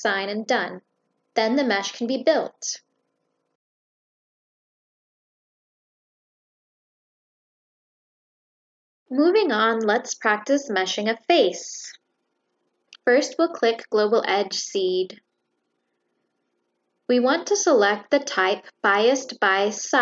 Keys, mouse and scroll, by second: 0.1 click, 2.7 click, 9.7 click, 10.1 click, 11.5 click, 12.7 click, 13.4 click, 14.0 click, 15.1 click, 16.8 click.